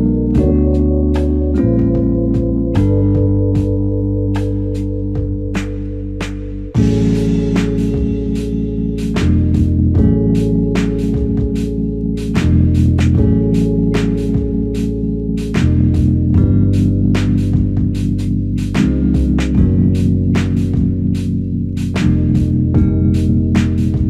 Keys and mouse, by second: 4.5 shift+click, 7.6 ctrl+alt+click, 8.3 alt+shift+click, 8.9 alt+click, 10.1 double click, 12.5 shift+click, 13.7 alt+click, 14.4 ctrl+alt+click, 17.5 shift+click, 19.2 shift+click, 20.7 alt+click, 22.8 alt+click.